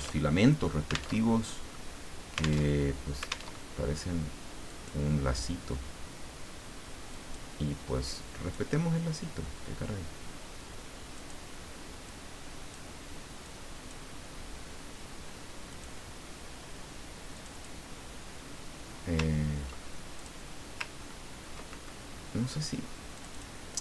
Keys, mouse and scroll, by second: 0.2 alt+Tab, 1.1 alt+Tab, 2.6 alt+Tab, 3.5 alt+Tab, 4.7 click, 7.1 click, 8.0-9.0 drag, 11.1 click, 12.0 click, 13.4 click, 15.7 click, 17.3 click, 20.1 ctrl+click, 21.0-21.4 ctrl+scroll up 2, 23.1 click.